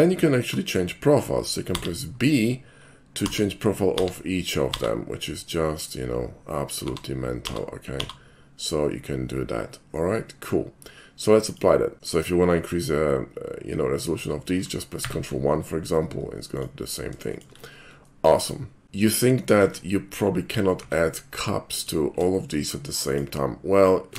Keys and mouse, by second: 1.8 b, 11.4 click, 12.6-14.3 shift+middle drag, 16.6 ctrl+click, 17.4 shift+middle click, 18.1 shift+middle click, 19.0 shift+middle click, 19.6 shift+a, 20.8 q, 21.8 alt+click, 23.1 alt+click.